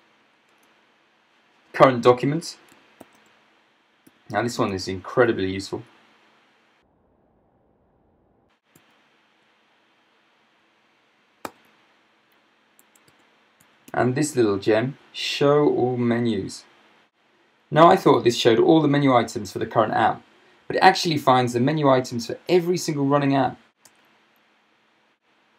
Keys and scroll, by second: 0.5 Return, 1.3 Return, 3.0 super+space, 4.1-4.6 typing, 5.7 Right, 8.8 ctrl+7, 9.1 ctrl+7, 11.6 super+space, 12.6-14.6 typing, 23.9 Return.